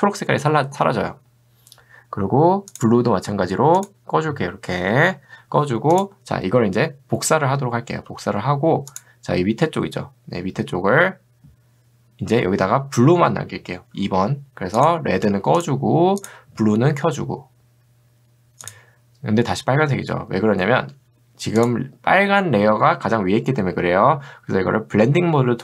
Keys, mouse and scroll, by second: 3.8 click, 6.0 click, 8.9 click, 14.8 click, 15.6 click, 21.6 click.